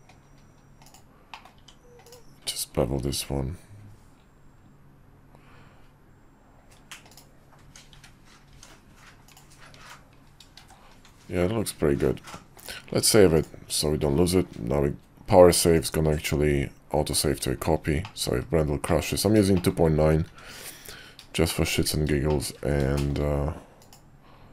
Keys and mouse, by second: 1.3 middle click, 1.5 Tab, 2.0 click, 3.0 ctrl+b, 7.6 Tab, 7.9 `, 8.5 Tab, 9.2 click, 9.8 Tab, 10.6 shift+2, 12.7-13.6 drag, 15.7-17.3 drag, 18.0 shift+middle drag, 18.8-19.3 middle drag, 19.5 shift+middle click, 20.0 KP_5, 20.3 `, 20.9 KP_5, 21.5 shift+middle drag, 22.3 shift+middle click, 22.9 shift+middle drag, 23.8 click.